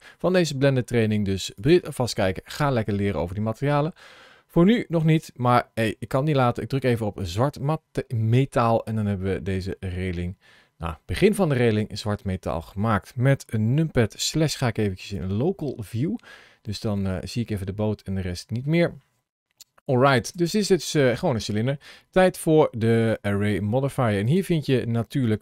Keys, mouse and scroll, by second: 1.4 click, 8.1 middle click, 14.1 KP_Divide, 15.0 KP_Divide, 15.9 scroll down 1, 16.6 middle click, 16.6 scroll down 3, 18.7 middle click, 20.2 Tab, 21.1 Tab, 24.1 click.